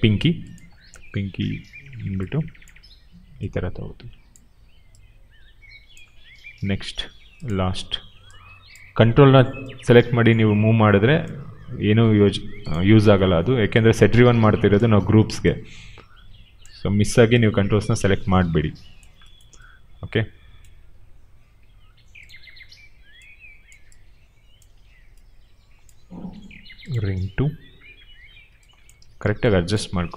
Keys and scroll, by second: 28.9 ctrl+z.